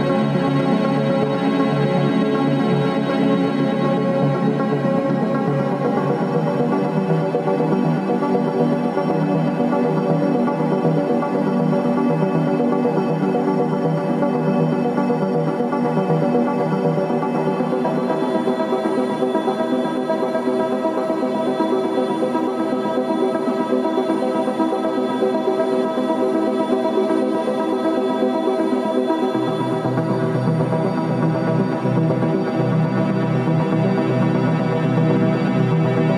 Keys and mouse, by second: 0.7 e, 6.5 Tab, 7.0-7.8 middle drag, 11.3 click, 12.1-13.0 middle drag, 13.3 click, 14.1-14.6 middle drag, 15.9 ctrl+s, 16.4-20.5 middle drag, 22.0 click, 22.8 ctrl+s, 24.1-24.8 middle drag, 25.2 click, 30.5 click, 32.0 click, 32.8 click, 35.0 click.